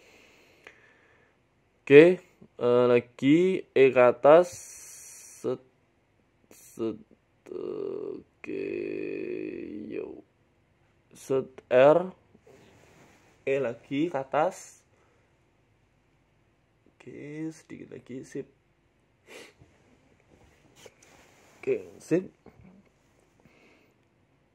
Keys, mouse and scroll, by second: 1.4 shift+middle click, 2.4-6.1 typing, 4.9 ctrl+z, 5.2 ctrl+z, 7.1 shift+middle click, 8.0 l, 8.5 g, 9.6 click, 10.6-13.4 typing, 14.4 r, 15.1 g, 15.8 r, 16.9-20.7 typing, 21.9 g, 22.5 s, 23.1 e.